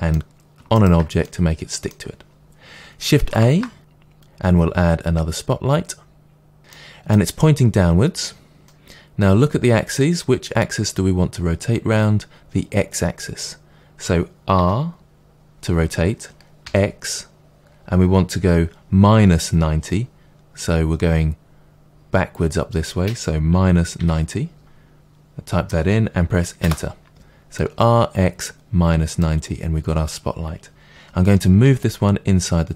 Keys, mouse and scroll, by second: 0.7-1.2 shift+right drag, 1.2-16.5 middle drag, 3.4 shift+a, 14.5 r, 26.7 Return, 27.5 middle click, 31.6 g.